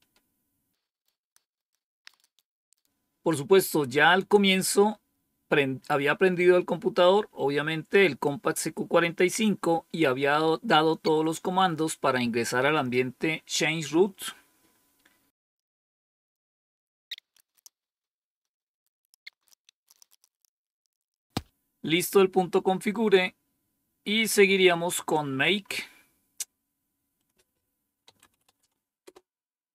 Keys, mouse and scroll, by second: 0.9 scroll down 1, 1.1-4.2 scroll up 1, 4.2 super+w, 4.4-9.9 typing, 5.0 click, 5.5 click, 5.7-6.2 scroll down 2, 5.9 click, 6.2 scroll up 1, 9.6-10.5 scroll down 3, 10.2 click, 10.5 click, 10.7 right click, 11.1-14.5 typing, 14.9 right click, 15.3 right click, 15.5 Right, 15.5 Return, 15.8 click, 16.1 right click, 16.3 Return, 16.4 scroll down 1, 16.6 click, 16.8 ctrl+c, 17.2 click, 17.3 ctrl+c, 17.4 click, 17.5 ctrl+shift+v, 17.6 Return, 18.3 scroll down 1, 18.4 click, 18.6 click, 18.8 ctrl+c, 18.9 click, 19.0 ctrl+shift+v, 19.1 Return, 19.2-21.6 typing, 21.3 scroll down 1, 22.0-22.8 scroll down 1, 22.8 scroll down 1, 23.4-23.9 scroll down 1, 23.9 scroll up 1, 24.5-25.5 scroll up 1, 25.5 scroll down 1, 27.1 click, 27.7-28.8 typing, 28.9 Return.